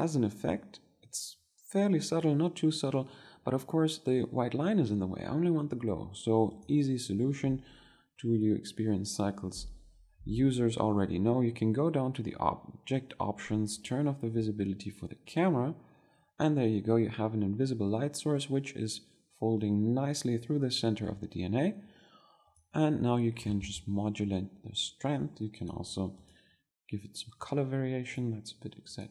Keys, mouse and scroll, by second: 3.8-4.9 middle drag, 14.7-26.6 drag, 27.5-29.1 drag.